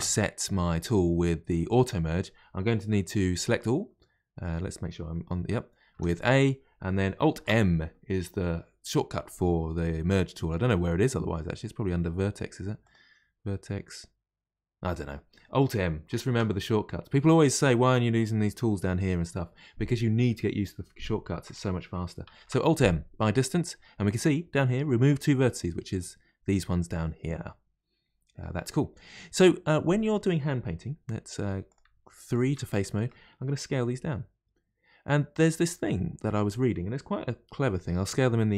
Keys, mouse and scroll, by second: 0.7 click, 4.4 click, 5.9 a, 7.3 alt+m, 12.8-15.8 drag, 16.2 alt+m, 22.3 alt+m, 25.5-28.8 middle drag, 28.8-29.1 scroll down 1, 29.1-31.4 middle drag, 31.4 3, 31.7 click, 32.3 shift+click, 32.7-33.7 middle drag, 33.7 s, 35.7-38.0 middle drag, 38.0 s.